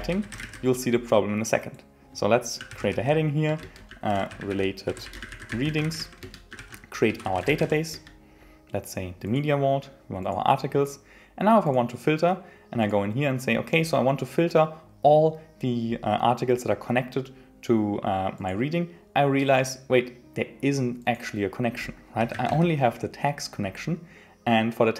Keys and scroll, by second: 3.6 Return, 6.2 Return, 7.9 Return.